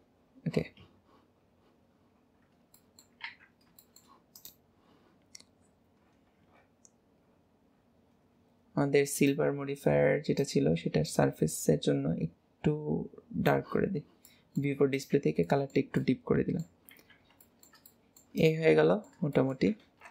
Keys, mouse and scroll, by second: 0.2 scroll down 2, 0.4-1.4 scroll up 1, 1.4-2.2 scroll up 1, 2.2 scroll down 2, 2.4 scroll up 1, 2.6-2.9 scroll down 2, 2.9 middle click, 3.4 ctrl+s, 3.5 scroll up 1, 3.6-3.9 scroll down 2, 3.9 shift+middle click, 4.5 click, 5.6-6.1 scroll down 2, 6.1 scroll up 3, 6.2-6.6 scroll down 1, 6.6-7.3 scroll up 1, 7.3 scroll down 4, 7.4-7.8 scroll up 1, 7.8-8.3 scroll down 8, 8.3 scroll up 1, 8.4-9.2 scroll down 2, 9.2 click, 14.0 scroll down 2, 14.4-15.0 middle drag, 15.0 click, 15.6-17.1 shift+middle drag, 17.1 ctrl+s, 17.5-18.4 shift+middle drag, 18.4 click, 18.8-20.1 middle drag.